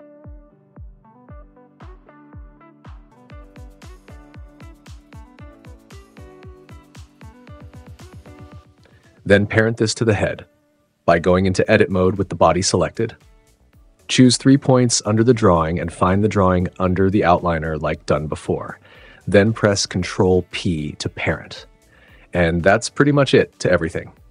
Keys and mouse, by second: 5.9 super+s, 9.7 super+s, 13.1 Tab, 15.9 shift+click, 17.3 shift+click, 19.1 click, 20.3 ctrl+p, 22.1 Tab, 22.9 space.